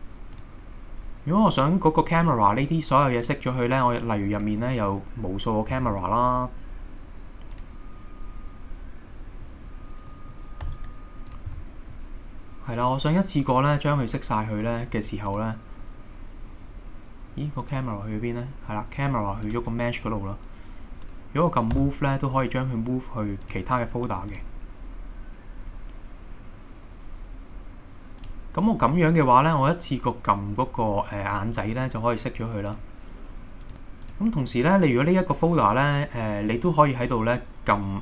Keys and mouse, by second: 5.9 shift+a, 9.3 middle click, 10.1 middle click, 10.6 g, 11.3 click, 11.6-11.9 middle drag, 19.2 click, 21.8 m, 28.2 click, 32.7 click.